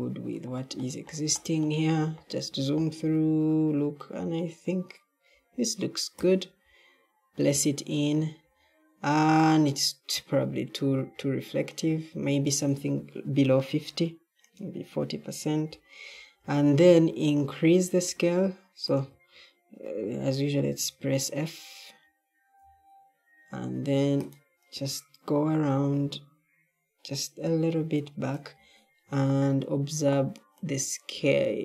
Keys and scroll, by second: 22.5 f, 25.6 d, 27.3 s.